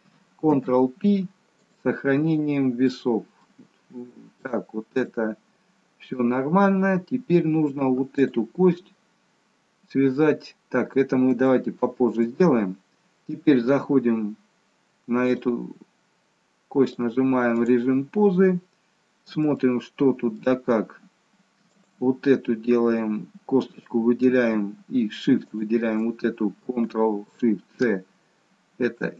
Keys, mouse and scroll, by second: 0.6 ctrl+p, 2.1-2.9 scroll down 1, 2.9 middle click, 2.9-3.5 scroll down 1, 4.4 shift+middle click, 5.2-5.9 scroll down 1, 5.9-6.6 scroll down 1, 6.6-7.3 scroll up 1, 7.3-8.1 scroll up 1, 8.1 click, 10.7-11.1 scroll down 1, 11.4 shift+middle click, 15.1 click, 16.7 click, 18.8-19.4 scroll up 1, 19.4 shift+middle click, 21.6 click, 25.4 shift+click.